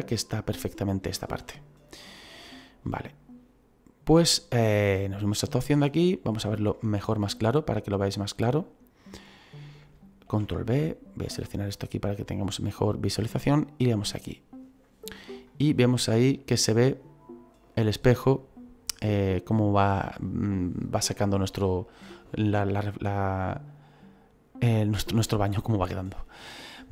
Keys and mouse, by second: 5.0 click, 5.6 middle click, 7.2 middle click, 10.2 ctrl+b, 11.2 click, 13.4 click, 15.4 middle click, 25.5 middle click.